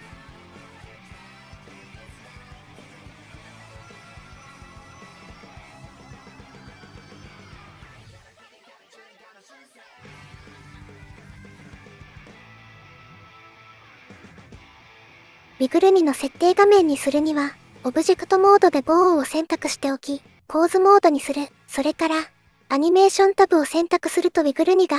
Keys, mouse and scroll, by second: 21.9 click.